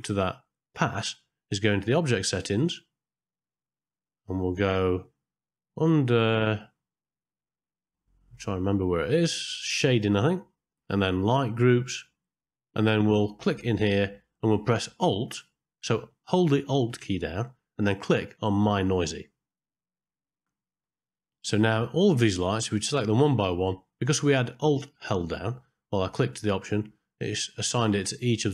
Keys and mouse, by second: 3.1-9.0 middle drag, 9.9 click, 10.3 middle click, 11.8 click, 13.6-19.7 drag, 23.4 click, 27.9 click, 28.3 click.